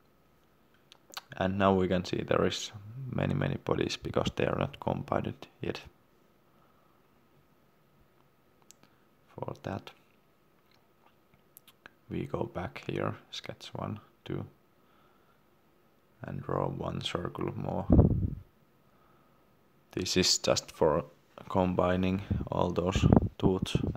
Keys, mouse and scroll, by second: 4.4 shift+middle click, 6.8 click, 11.4 right click, 12.8 click, 14.0 middle click, 14.4 c, 16.9 click.